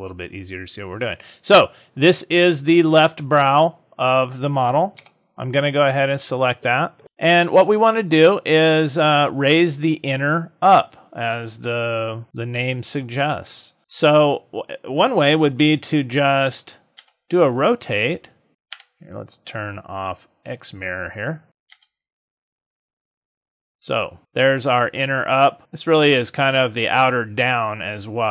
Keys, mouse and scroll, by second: 2.1 click, 5.0 l, 16.9 r, 20.6 click, 21.6 r.